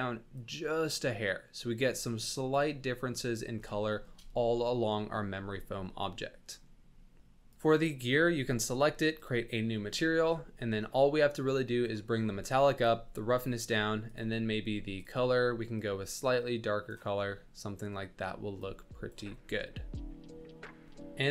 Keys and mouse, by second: 3.8 shift+middle click, 4.5-5.4 middle drag, 5.8-6.6 drag, 9.1 click, 10.0 click, 11.5 click, 12.8 ctrl+click, 14.0 click, 17.3-18.1 middle drag, 18.8 ctrl+middle click, 19.4-21.3 middle drag.